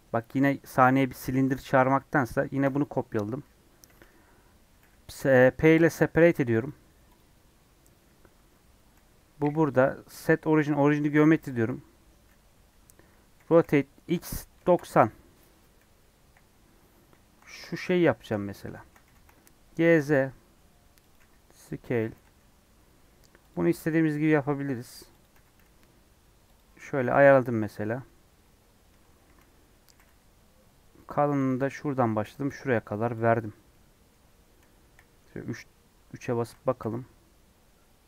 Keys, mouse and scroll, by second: 5.8 p, 6.0 Tab, 6.2 Left, 6.6 Left, 7.6 Tab, 8.1 Tab, 9.0 g, 10.6 right click, 11.1 Tab, 11.3 Tab, 13.4 r, 16.1 KP_1, 17.9 shift+middle click, 18.2 scroll up 3, 18.6 shift+middle click, 19.0 g, 21.1 s, 22.0 g, 23.5 s, 25.3 g, 26.8 scroll down 1, 26.9 middle click, 27.3 scroll up 1, 28.9 Tab, 29.2 a, 29.9 g, 31.5 e, 33.7-34.8 middle drag, 34.8 KP_1, 35.1 KP_3, 35.7-36.4 scroll up 3, 36.4 a, 36.8 g.